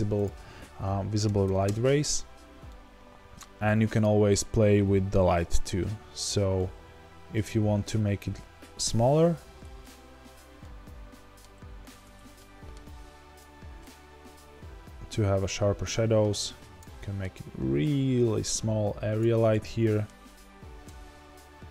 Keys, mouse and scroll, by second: 1.7 KP_Enter, 2.7-5.5 middle drag, 5.5 click, 5.7-13.4 middle drag, 7.8 scroll up 2, 8.3 z, 16.9-18.5 middle drag, 18.5 click, 19.4-21.7 middle drag, 20.1-21.7 scroll down 2.